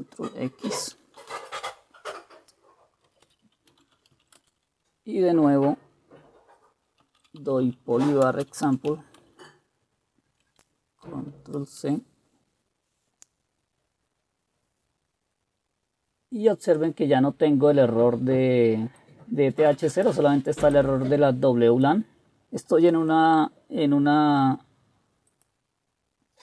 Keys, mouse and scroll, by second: 1.1-1.8 typing, 3.2-4.8 typing, 6.9-9.0 typing, 9.3 Return, 11.6 ctrl+c, 14.7-17.7 scroll up 1.